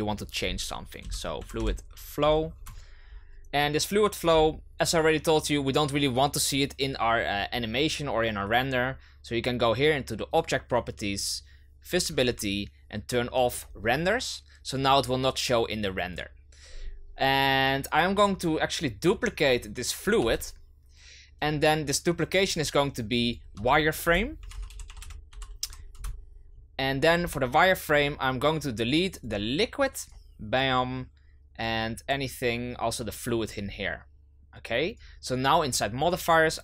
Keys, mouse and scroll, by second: 10.3 click, 11.9-13.6 drag, 16.1-18.7 drag, 18.7 right click, 20.7 shift+d, 22.4 click, 22.6 click, 23.1 click, 23.2-26.2 drag, 27.8 click, 29.4 click, 30.0-31.6 drag, 33.4-34.9 drag.